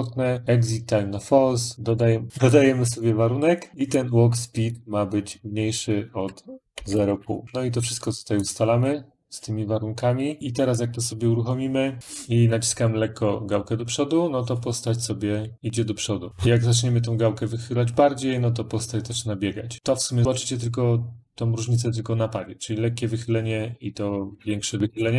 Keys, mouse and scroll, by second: 0.4 click, 2.9 click, 3.7 click, 3.8 click, 4.6 click, 5.1 click, 5.7 click, 6.3-7.4 typing, 7.4 click, 8.3 click, 8.7 click, 11.1 click.